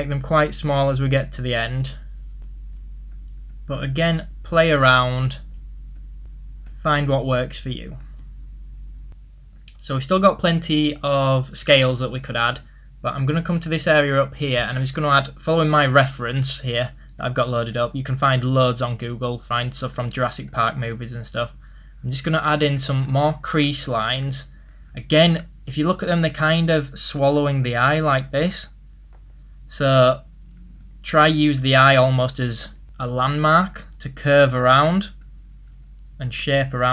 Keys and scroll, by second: 14.4 ctrl+z, 28.7 ctrl+z.